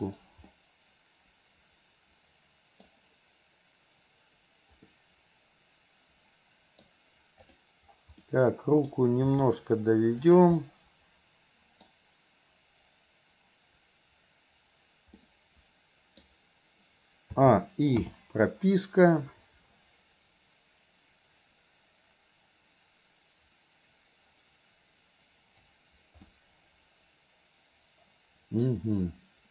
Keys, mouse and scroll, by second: 0.5-6.9 middle drag, 8.3 middle click, 9.3 r, 10.6-12.0 middle drag, 15.2-16.2 middle drag, 17.5 a, 18.1 i, 19.4-25.8 drag, 26.3-28.6 middle drag.